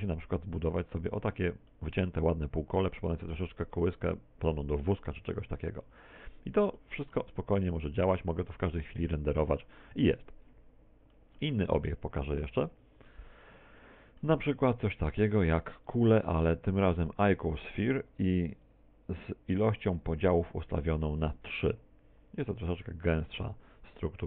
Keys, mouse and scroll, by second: 2.7 middle click, 7.7 middle click, 8.7 middle click, 11.1 F12, 11.1 Escape, 12.1 middle click, 12.7 x, 13.7 KP_1, 14.9 middle click, 16.4 shift+a, 19.1 t, 20.7 click.